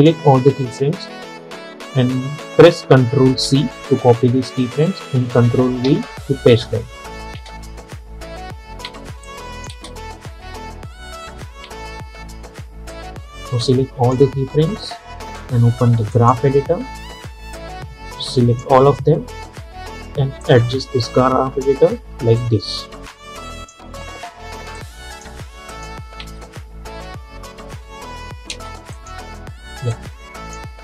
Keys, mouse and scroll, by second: 3.5 ctrl+c, 5.9 ctrl+v, 7.4 space, 9.3 click, 9.8 space, 13.0-25.8 drag, 26.3 space, 28.6 space, 29.0-30.8 drag.